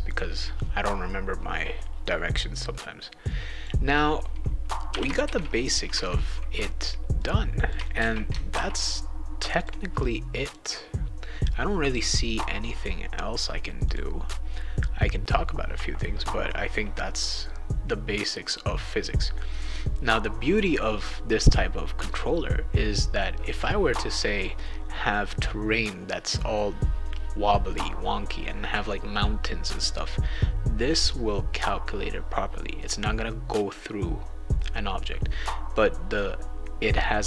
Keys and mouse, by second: 0.1 click, 3.2 click, 4.9 ., 5.2 shift+d, 7.1 click, 7.9 shift+a, 8.5 ctrl+s, 9.5 click, 10.4 click, 10.6 click, 11.5 click, 13.8 click.